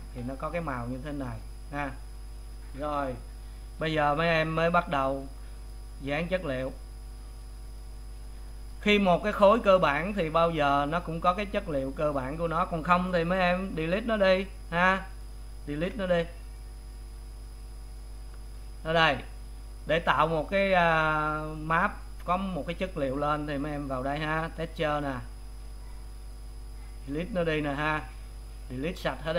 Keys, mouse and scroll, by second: 0.7-5.7 middle drag, 5.7 click, 7.4-9.4 drag, 12.2 click, 14.0 Delete, 15.1 click, 15.9 Delete, 20.5 click, 26.6-27.2 scroll up 4, 27.2-29.3 drag.